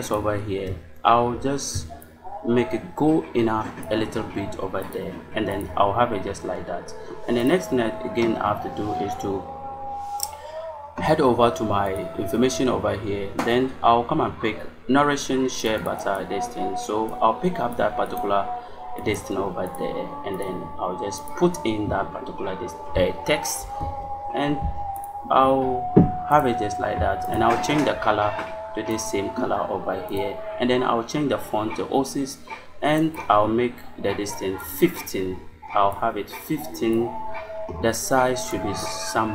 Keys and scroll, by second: 19.6 space, 23.5 ctrl+v.